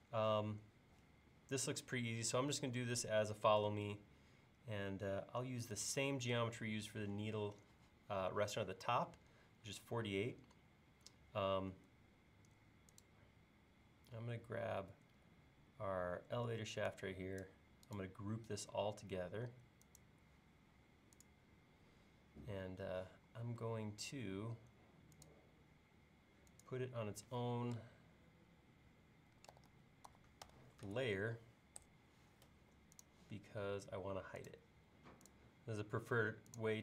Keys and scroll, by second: 29.1-31.7 typing, 31.8 Return.